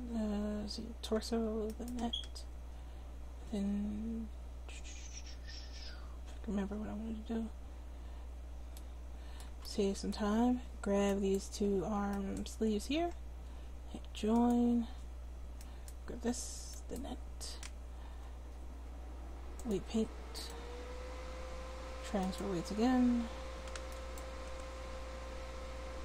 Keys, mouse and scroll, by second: 1.7-4.2 middle drag, 11.1-14.8 right drag, 16.2-19.3 drag, 20.5-23.0 drag, 24.4 r.